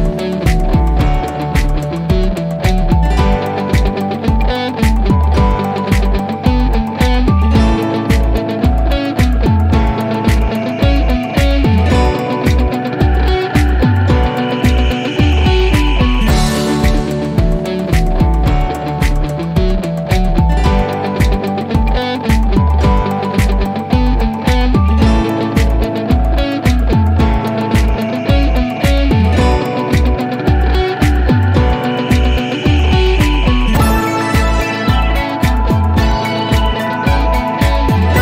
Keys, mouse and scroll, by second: 0.4 typing, 1.2 Return, 2.7 click, 4.6 click, 6.9-7.6 typing, 7.8 Return, 11.5 click, 13.6 click, 17.7 click, 21.7 click, 24.3 2, 25.0 Return, 26.1 click, 30.3 typing, 31.0 Return, 32.6-34.6 drag, 35.4-36.7 typing, 36.8 Return.